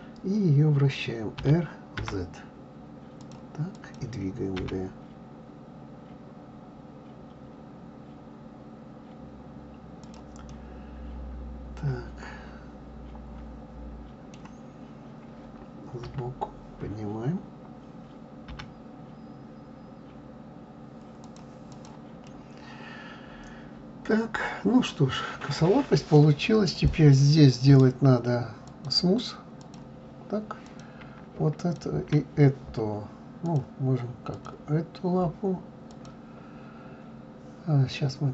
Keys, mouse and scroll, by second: 1.4 r, 3.7 click, 4.6 g, 10.5-13.5 middle drag, 16.0 KP_3, 18.5 g, 21.7 click, 22.3-25.3 middle drag, 26.7 click, 27.7-29.6 right drag, 29.6 click, 30.6 click, 31.6 shift+click, 33.5 click, 34.3 click, 35.9-38.3 drag.